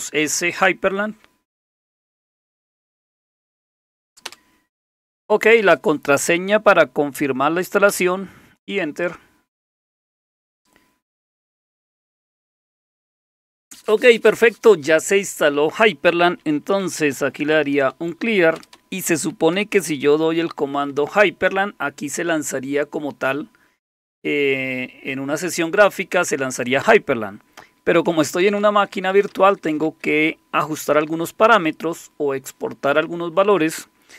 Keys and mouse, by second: 2.7-4.3 typing, 7.9 Return, 16.6-17.9 typing, 18.6 Return, 18.7 Return, 19.3-20.9 typing, 28.4-29.9 typing.